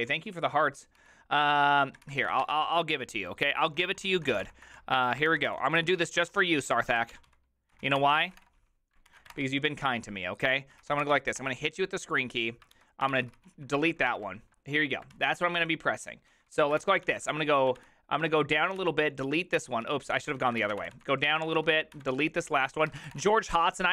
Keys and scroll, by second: 13.1 alt+h, 13.1 ctrl+c, 13.2 ctrl+c, 13.3 ctrl+c, 14.1 alt+l, 15.2 alt+{, 16.0-17.3 typing, 17.8 ctrl+d, 18.3-23.9 typing.